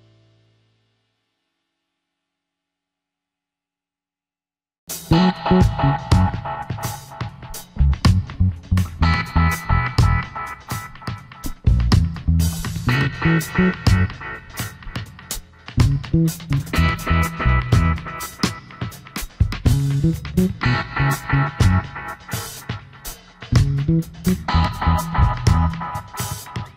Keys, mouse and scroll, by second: 7.0 Delete, 17.5 alt+scroll down 1, 17.8 space, 21.3 alt+shift+click, 24.5 space.